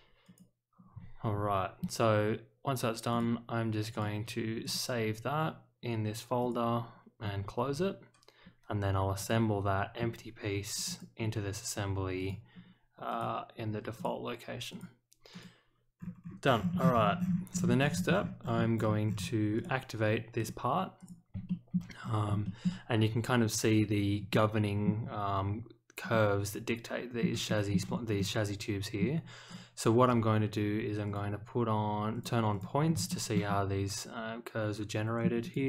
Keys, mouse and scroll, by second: 0.2 click, 3.1 click, 3.9 click, 4.6 click, 6.4 click, 9.1 click, 10.7 click, 10.8 click, 12.1 click, 13.1 click, 13.9 click, 14.7 click, 15.3 click, 15.9-17.6 scroll down 8, 17.6 middle click, 18.1-19.1 scroll down 5, 19.5 click, 20.3 click, 20.9 click, 21.4 shift+middle click, 22.0 scroll down 1, 22.4 shift+middle click, 24.3 middle click, 26.1-27.2 middle drag, 27.4 shift+middle drag, 28.1 middle click, 29.4 click, 31.0 click, 32.1 click, 32.5 click, 32.8 middle click, 32.8 scroll up 1, 33.1 shift+middle click, 33.4-35.2 middle drag, 35.4 click.